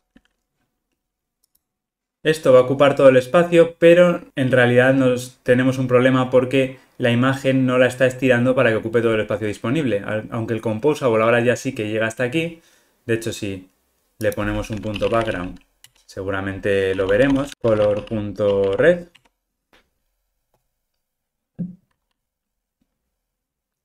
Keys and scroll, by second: 15.9 Return, 20.6 ctrl+r.